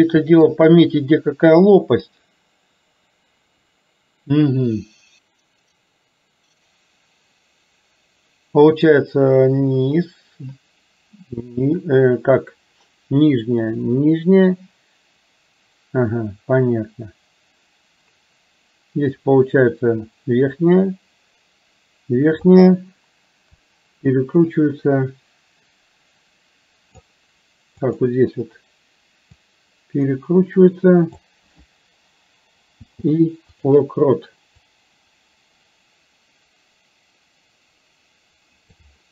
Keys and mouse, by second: 1.9-22.6 drag, 23.7-27.1 drag, 28.0 click, 29.6-31.3 drag, 32.8 i, 34.7-38.8 drag.